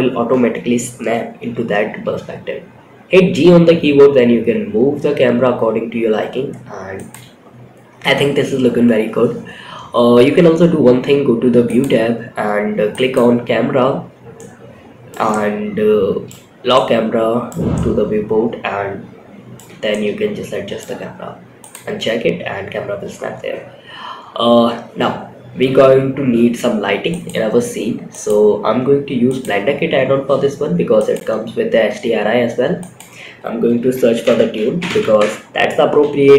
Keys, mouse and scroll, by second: 1.2 g, 11.0 click, 12.3 click, 13.8 middle click, 14.7-15.6 shift+middle drag, 16.1 middle click, 17.0 shift+scroll up 1, 17.1-18.9 shift+middle drag, 19.2 shift+middle click, 20.9 click, 26.4 click, 27.5 click, 28.6 click, 30.4 click, 32.1-34.5 drag.